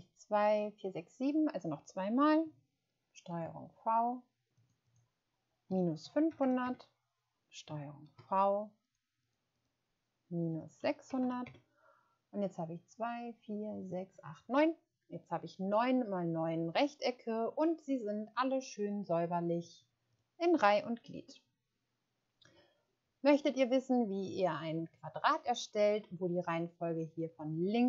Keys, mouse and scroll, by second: 3.3 ctrl+v, 4.5 click, 6.0-6.4 typing, 6.6 Return, 8.0 ctrl+v, 9.2 click, 10.8 typing, 11.4 Return, 18.8 click.